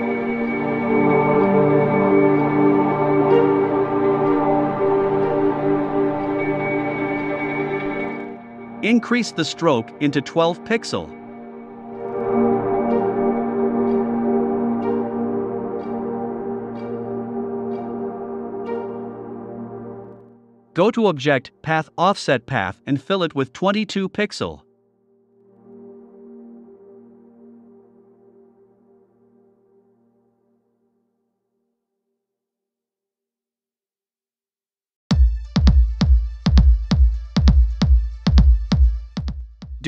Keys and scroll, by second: 18.6 1, 19.0 5, 20.3 5, 23.6 BackSpace, 24.0 2, 25.3 0, 29.3 Right, 29.6 BackSpace, 29.9 2, 34.5 super+d, 35.6 super+z.